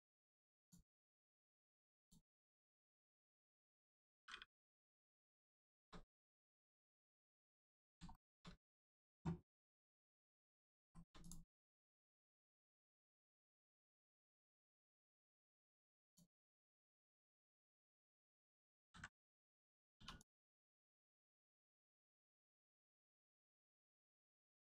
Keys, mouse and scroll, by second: 0.5 click, 1.3 ctrl+click, 2.6 click, 2.7 middle click, 5.2 shift+middle click, 6.9 middle click, 6.9 middle click, 7.4 scroll down 1, 7.7 middle click, 8.1 shift+middle click, 9.9 click, 10.3 scroll up 1, 10.7 shift+middle click, 11.1 click, 11.7 shift+middle click, 12.1 scroll up 1, 13.7 shift+middle click, 14.9 click, 15.0 click, 17.1 click, 18.7 ctrl+z, 19.9 z, 20.1 click.